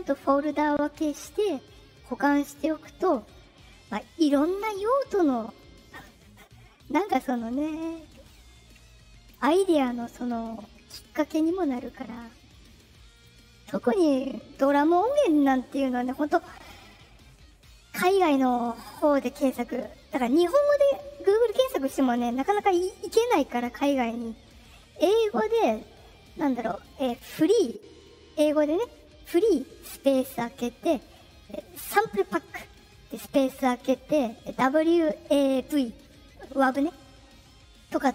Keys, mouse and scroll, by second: 5.4 right click, 7.0 click, 7.1 click, 9.6 right click, 10.4 right click, 11.7 click, 12.3 right click, 13.1 click, 13.7 right click, 14.5 click, 15.1 click.